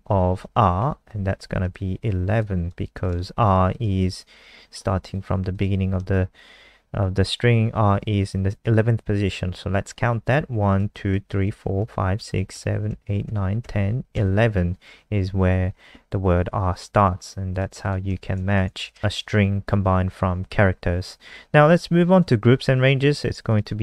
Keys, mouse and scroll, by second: 0.1 ctrl+Left, 0.4 ;, 0.5 ctrl+s, 0.8 F5, 1.7 alt+click, 2.8 click, 3.4 click, 4.4 Left, 5.0 click, 10.7 Right, 11.1 Right, 11.4 Right, 11.8 Right, 12.1 Right, 12.5 Right, 12.9 Right, 13.2 Right, 13.6 Right, 14.1 Right, 17.5 click, 17.8 click, 18.4 shift+Home, 18.7 BackSpace, 18.9 BackSpace, 22.2 click.